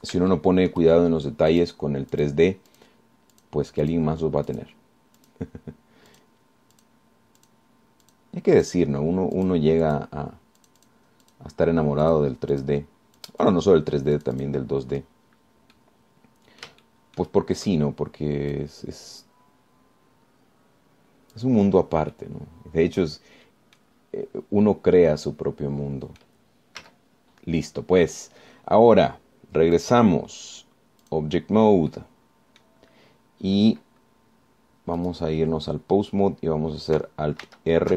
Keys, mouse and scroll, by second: 0.3 click, 0.3 right click, 1.5 shift+middle click, 2.7 click, 3.3 click, 3.9 click, 4.5 click, 5.1 click, 5.7 click, 6.4 click, 7.3 click, 8.0 click, 8.6 click, 9.3 click, 9.8 click, 10.6 click, 11.1 click, 11.8 click, 12.5 click, 13.3 click, 13.7 click, 14.4 click, 15.4 click, 16.0-16.4 scroll down 2, 16.9 click, 17.1 scroll down 2, 18.1 shift+click, 19.7-22.7 drag, 23.0 scroll down 2, 23.3-24.5 drag, 24.5 scroll down 1, 25.2 scroll down 1, 25.5 scroll up 1, 25.9-27.6 drag, 28.0 z, 28.8-29.1 scroll down 1, 31.0 click, 32.3 click, 33.1 click, 34.1 scroll up 2, 36.2 click.